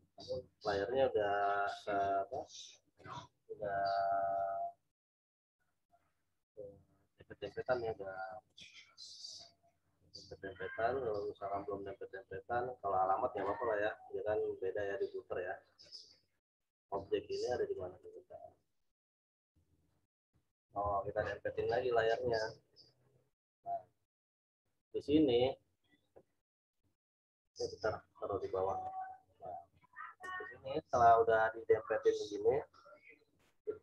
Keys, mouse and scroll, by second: 1.9 click, 9.3-9.8 scroll up 1, 13.3 click, 15.8 click, 17.9 right click, 19.7-33.8 drag.